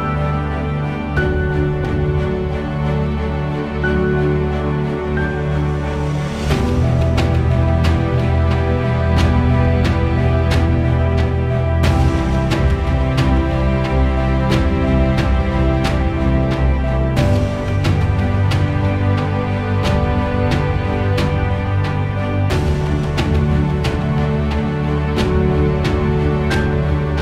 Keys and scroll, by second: 11.4 1, 11.8 Return, 16.2 2, 16.5 Return, 25.8 2, 26.1 Return.